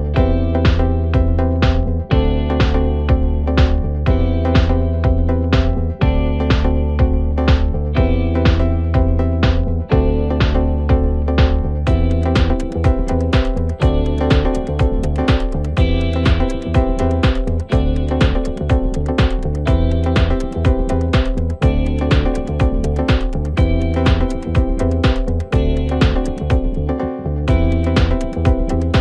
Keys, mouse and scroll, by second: 1.7 KP_1, 2.6-3.3 scroll up 2, 3.3-4.1 scroll up 1, 4.1 2, 5.0 click, 5.2 click, 6.0 r, 12.0-13.2 scroll up 1, 13.2 Tab, 13.6-14.6 scroll down 1, 14.6-15.9 middle drag, 15.9-16.5 scroll up 1, 16.5 Tab, 17.5 ctrl+r, 21.2 ctrl+r, 24.0-25.7 middle drag, 25.7 ctrl+r, 28.1 middle click, 28.6-29.0 scroll up 2.